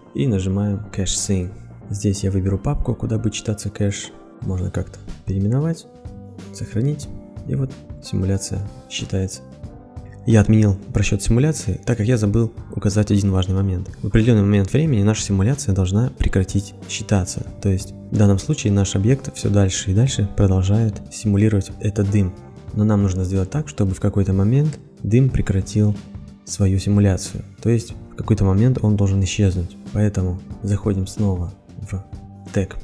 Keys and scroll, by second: 5.5 shift+-.